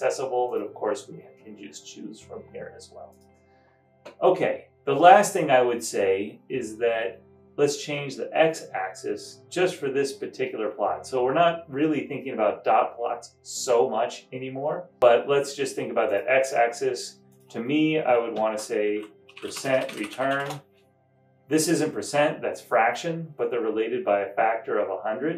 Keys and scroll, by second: 18.5-20.8 typing, 23.5 typing.